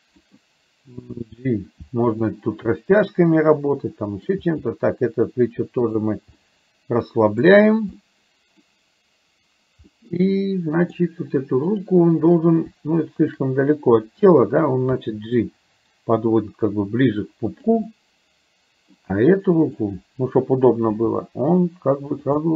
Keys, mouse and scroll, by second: 1.3 g, 3.9 middle click, 4.5 g, 6.4-7.4 middle drag, 7.4-7.8 scroll down 1, 8.0-8.5 scroll up 1, 8.5 middle click, 9.9 scroll up 1, 10.1 middle click, 11.8 click, 13.3 shift+click, 15.0 g, 17.9-19.0 middle drag, 19.8 click, 21.0 g, 22.4-22.5 middle drag.